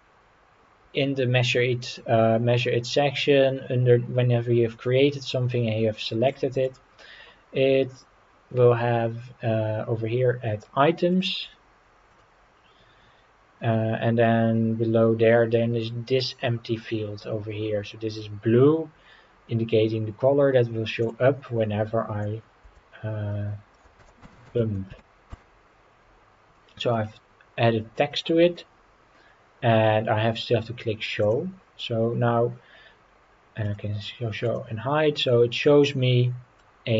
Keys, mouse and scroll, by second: 1.6-3.1 scroll down 2, 3.1-4.9 scroll down 1, 6.3 click, 6.6 click, 9.0-9.7 scroll down 3, 11.1 click, 12.1 click, 12.5-14.9 scroll down 3, 21.0-25.3 drag, 26.9-28.1 middle drag, 31.2 click, 32.0-32.4 scroll up 3, 33.6 click, 34.4 click, 35.0-35.3 scroll up 3, 35.3 scroll down 2, 35.9-36.6 middle drag.